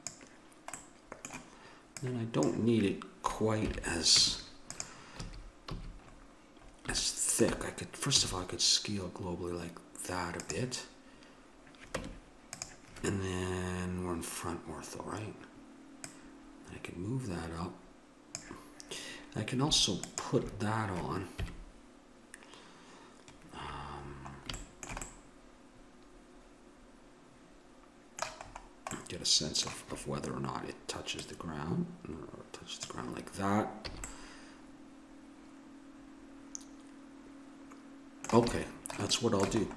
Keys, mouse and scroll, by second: 0.8-1.9 middle drag, 1.9-3.5 drag, 3.7 KP_1, 4.2 Tab, 5.2 a, 5.7 a, 6.1 middle click, 8.2 s, 12.0 Tab, 16.0-17.9 drag, 20.0 middle click, 21.4 KP_1, 24.0-26.9 middle drag, 28.2 middle click, 31.2-32.9 drag, 33.9 a, 34.6-35.7 middle drag, 36.9 middle click, 39.1-39.7 middle drag.